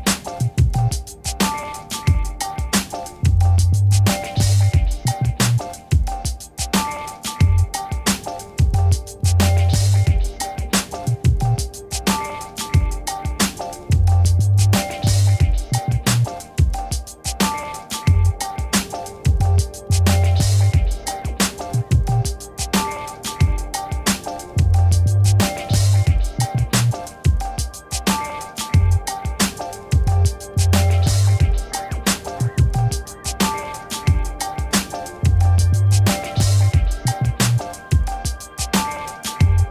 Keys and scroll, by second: 0.0 x, 0.5 Return, 4.1 v, 11.6 5, 12.0 Return, 14.8-16.7 typing, 18.8 space, 19.2 b, 19.4 o, 20.0 x, 21.2 Return.